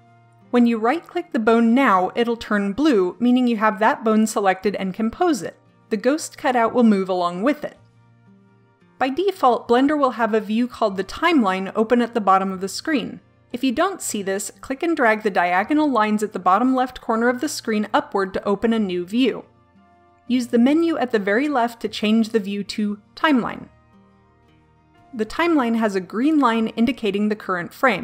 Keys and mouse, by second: 5.8-6.9 drag, 8.1 KP_1, 8.3 ctrl+z, 14.9-15.9 drag, 16.0 click, 16.1-21.8 drag, 23.1 click, 24.3 click, 26.5-28.0 drag.